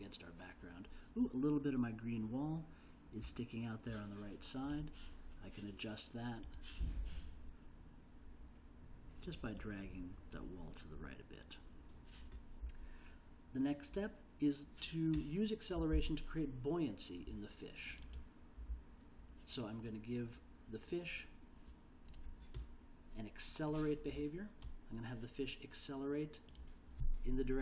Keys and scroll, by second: 27.4-27.6 typing.